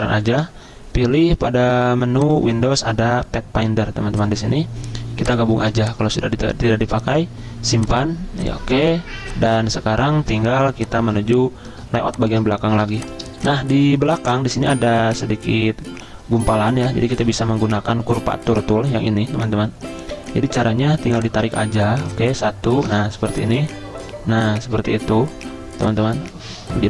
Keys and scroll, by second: 10.6 z, 12.8 v, 17.8 `.